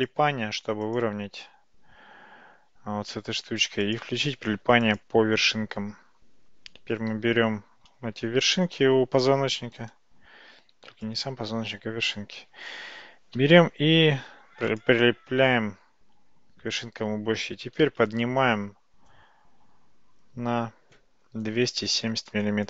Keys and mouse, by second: 0.9-5.8 drag, 7.2 g, 11.1 click, 12.4 g, 17.6 g.